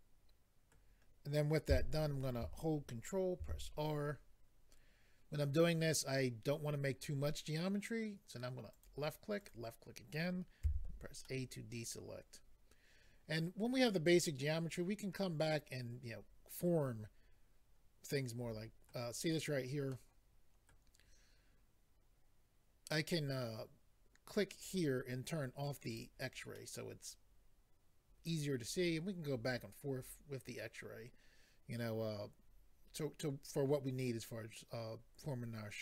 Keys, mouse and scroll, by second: 1.7 a, 3.4 ctrl+r, 4.4 scroll up 1, 8.7 click, 9.4 click, 10.6 a, 11.2 middle click, 19.9 middle click, 24.6 click, 25.9 click, 26.6 middle click.